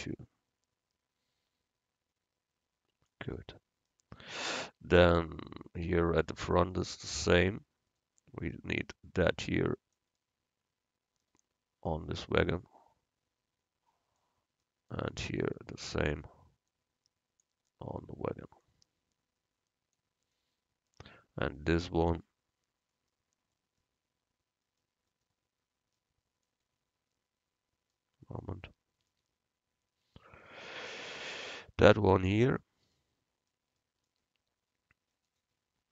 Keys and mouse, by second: 8.0-10.0 right drag, 8.9-10.7 drag, 10.3 middle click, 10.3 right click, 12.0-13.8 drag, 15.5 click, 15.9-17.5 right drag, 16.8-18.6 drag, 16.8 middle click, 18.6-20.0 middle drag, 18.7-20.4 drag, 18.7-20.0 right drag, 20.4 middle click, 21.6-26.1 right drag, 26.1-27.5 middle drag, 29.1 middle click, 31.9 click, 32.6-35.9 right drag.